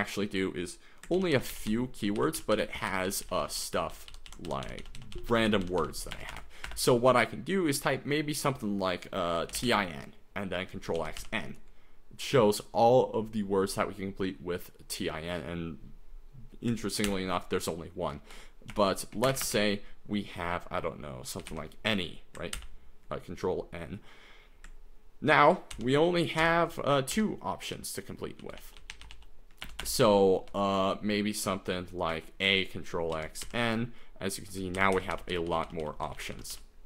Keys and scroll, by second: 1.2 ctrl+n, 1.3 ctrl+n, 1.5 ctrl+n, 1.7 ctrl+n, 1.9 ctrl+n, 1.9 ctrl+n, 2.3 ctrl+n, 2.5 ctrl+n, 2.7 ctrl+n, 2.9 ctrl+n, 3.1 ctrl+n, 3.2 ctrl+n, 3.4 ctrl+n, 3.5 ctrl+n, 3.7 ctrl+n, 3.9 ctrl+n, 4.1 ctrl+n, 4.3 ctrl+n, 4.4 ctrl+n, 4.6 ctrl+n, 4.8 ctrl+n, 5.0 ctrl+n, 5.1 ctrl+n, 5.3 ctrl+n, 5.5 ctrl+n, 5.6 ctrl+n, 5.8 ctrl+n, 6.1 BackSpace, 6.3 BackSpace, 6.6 BackSpace, 9.3-10.1 typing, 11.0 ctrl+x, 11.2 ctrl+n, 17.1 ctrl+n, 18.2 BackSpace, 18.7 BackSpace, 19.0 Escape, 19.3 shift+a, 19.4 Return, 21.2-22.0 typing, 22.6 ctrl+n, 25.7 ctrl+n, 26.4 ctrl+n, 27.3 ctrl+n, 27.7 ctrl+n, 28.4 ctrl+n, 28.6 ctrl+p, 28.8 ctrl+n, 28.9 ctrl+p, 29.0 ctrl+n, 29.1 ctrl+p, 29.6 BackSpace, 29.8 BackSpace, 30.5 BackSpace, 32.1 a, 33.1 ctrl+x, 33.4 ctrl+n, 34.8 ctrl+n, 34.9 ctrl+n, 35.1 ctrl+n, 35.3 ctrl+n, 35.5 ctrl+n, 35.6 ctrl+n, 36.0 ctrl+n, 36.1 ctrl+n, 36.3 ctrl+n, 36.5 ctrl+n.